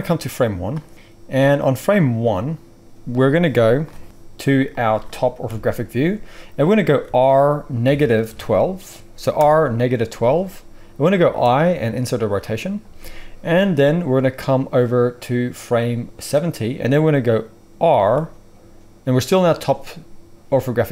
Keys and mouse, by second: 5.4 KP_7, 7.0 r, 11.2 i, 17.8 s.